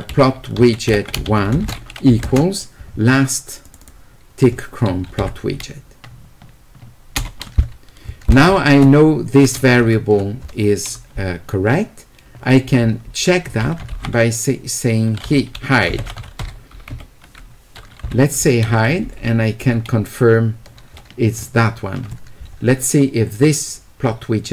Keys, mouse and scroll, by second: 0.6 a, 1.5 space, 2.2 space, 3.6 click, 15.8-16.7 typing.